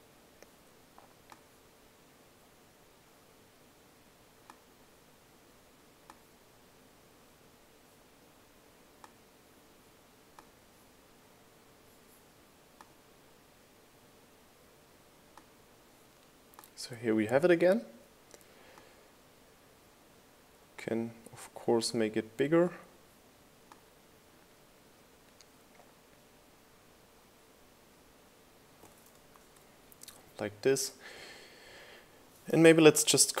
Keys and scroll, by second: 31.4 shift+Left.